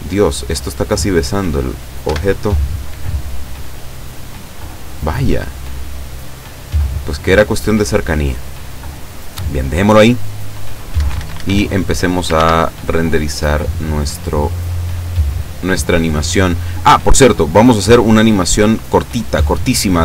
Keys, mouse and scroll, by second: 0.4-1.8 drag, 2.1 F12, 11.0 Escape, 12.3 ctrl+s, 12.7 ctrl+click, 14.7 click, 15.3-15.6 scroll up 1, 17.4 click.